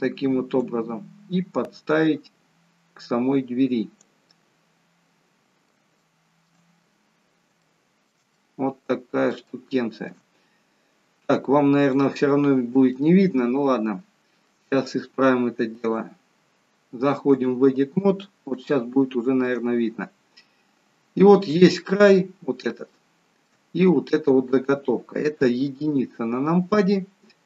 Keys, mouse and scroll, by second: 0.5 click, 4.3 middle click, 5.9 shift+middle click, 6.8-7.3 scroll up 4, 7.6 shift+middle click, 8.4 middle click, 9.4 shift+middle click, 12.0 click, 12.9 shift+middle click, 17.4 click, 18.6 shift+middle click, 19.9-21.8 scroll up 2, 21.8-22.1 scroll up 1, 22.1 scroll down 2, 22.7 scroll down 1, 22.9 shift+middle click, 25.4 KP_1.